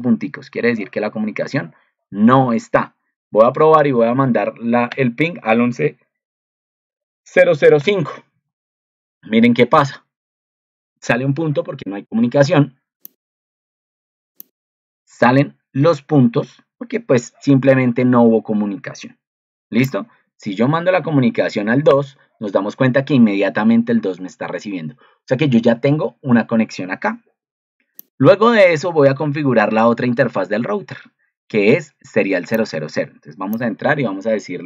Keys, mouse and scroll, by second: 13.5 alt+d.